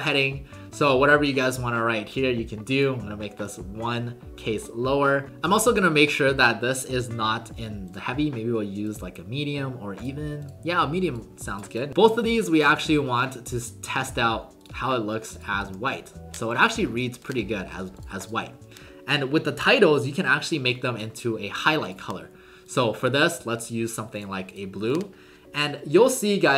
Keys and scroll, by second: 12.6 ctrl+a, 15.6 ctrl+a.